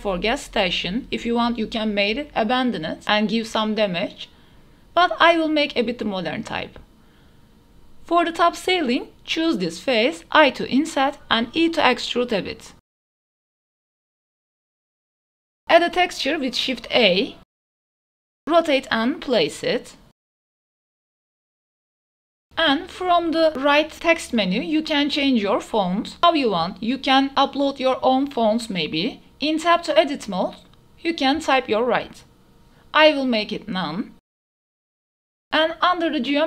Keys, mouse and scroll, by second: 0.0-0.6 typing, 0.4 click, 1.3 drag, 1.6 click, 2.2 shift+click, 2.6 KP_3, 2.9 shift+d, 2.9 y, 3.9 drag, 4.2 KP_3, 4.4 g, 4.5 y, 4.9 click, 5.2 ctrl+s, 5.4-5.8 drag, 6.0 shift+click, 6.0 a, 6.0 s, 6.2 click, 6.6 right click, 6.8 Tab, 7.4 click, 7.4 right click, 8.2 3, 8.4 click, 9.1 click, 9.1 right click, 9.7 i, 11.3-11.7 middle drag, 11.9 shift+middle drag, 12.4 click, 13.0 e, 15.0 click, 15.2 Tab, 15.5 shift+a, 17.0-17.5 drag, 18.0-22.3 typing, 19.6 KP_Enter, 20.2 KP_Enter, 21.0 shift+middle click, 22.8 click, 23.9 click, 27.7 shift+click, 31.4 Tab, 32.4-34.0 typing, 34.8 Tab, 35.0 middle click, 35.3 shift+middle click, 36.3 click.